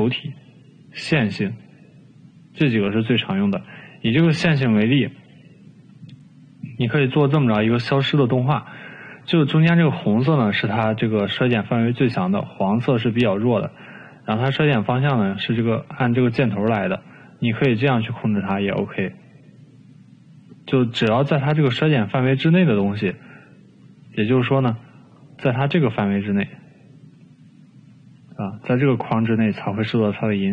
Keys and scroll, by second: 4.7 e.